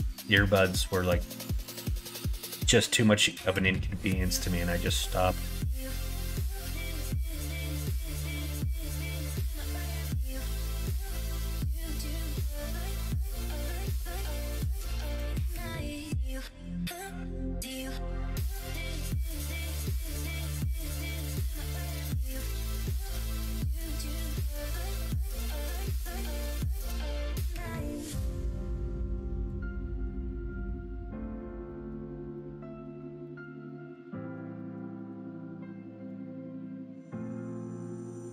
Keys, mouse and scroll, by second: 0.1 scroll down 1, 0.3 scroll up 1, 0.4 middle click, 0.6 scroll down 1, 1.3-2.7 drag, 3.0 middle click, 3.0 scroll up 1, 3.2-3.7 scroll down 2, 3.4 middle click, 4.0-5.4 middle drag, 4.0 scroll up 1, 4.3-4.7 scroll down 1, 4.7 scroll up 1, 6.0 middle click, 7.4 s, 10.8 scroll up 1, 10.9 middle click, 12.2 r, 14.4 middle click, 15.9-20.0 drag, 20.0 middle click, 20.7 middle click, 21.7-25.0 drag, 25.7 middle click, 27.0-29.4 drag, 29.6 scroll up 1, 29.7 middle click, 30.0 scroll down 1, 31.6 scroll up 1, 31.6 middle click, 31.8-32.3 scroll down 1, 32.3 scroll up 1, 32.3 middle click, 32.9 scroll down 1, 33.1 scroll up 1, 33.2 middle click, 33.5 shift+middle click, 34.0 middle click, 34.4 middle click, 34.8 scroll up 1, 34.9 middle click, 35.0 scroll down 1, 36.1-38.3 drag.